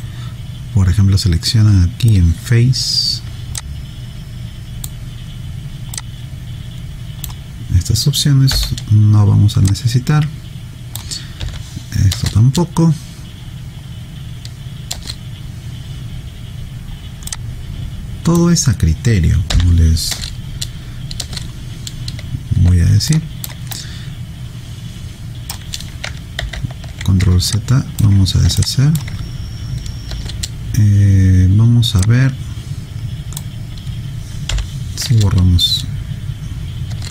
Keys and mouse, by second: 0.0 right click, 3.6 click, 8.5 Delete, 9.7 click, 11.4 Delete, 12.1 space, 15.0 space, 17.3 click, 19.5 Delete, 20.1 space, 23.1 alt+click, 23.8 right click, 26.4 ctrl+z, 27.5 alt+click, 28.6 alt+click, 30.2 space, 32.0 click, 34.5 Delete, 36.9 space.